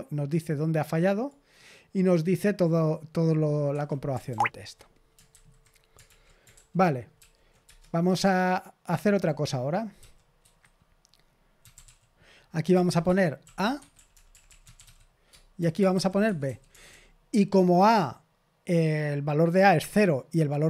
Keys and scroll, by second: 3.6 Escape, 4.2 ctrl+p, 5.3 super+h, 6.0 super+l, 6.5 ctrl+p, 7.1 ctrl+p, 7.6 Return, 8.1-16.9 typing.